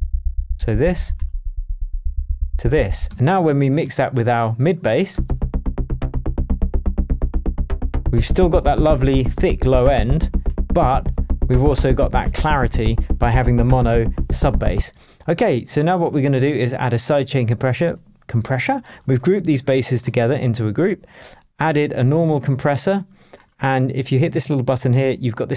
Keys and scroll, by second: 3.0 space, 3.5 super+space, 5.1 super+space, 14.7 space.